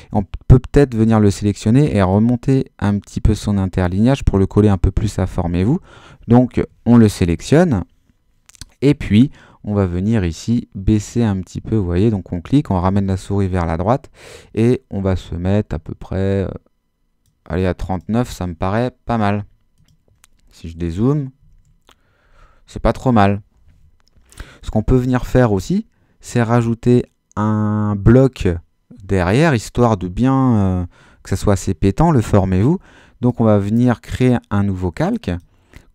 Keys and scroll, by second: 7.3 super++, 20.7 super+-.